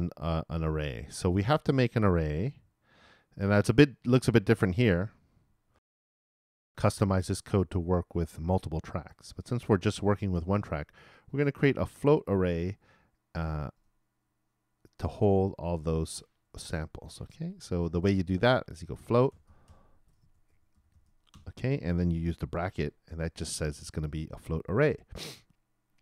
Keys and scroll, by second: 5.7 alt+i.